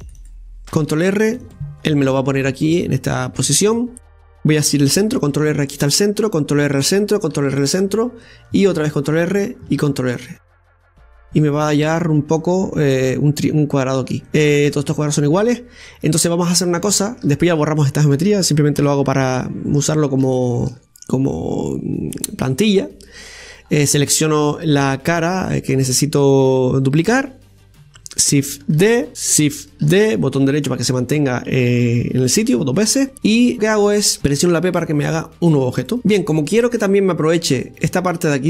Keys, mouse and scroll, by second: 0.5 ctrl+r, 1.8 ctrl+r, 3.4-4.0 scroll up 2, 4.0-6.1 middle drag, 6.1 ctrl+r, 7.2 ctrl+r, 11.7 ctrl+r, 11.7-12.8 middle drag, 12.8-13.3 scroll up 1, 13.3 scroll up 2, 13.3-15.2 middle drag, 15.2-17.8 scroll up 2, 17.9-19.7 shift+middle drag, 19.7 KP_7, 20.8-21.1 scroll up 5, 21.3-23.6 shift+middle drag, 23.6 click, 24.1 right click, 24.5 scroll down 1, 26.7-27.6 scroll down 1, 27.6-29.1 scroll down 1, 29.1 shift+d, 29.6 ctrl+z, 30.7 shift+d, 31.4-32.9 drag, 35.2 p, 36.0-38.4 middle drag.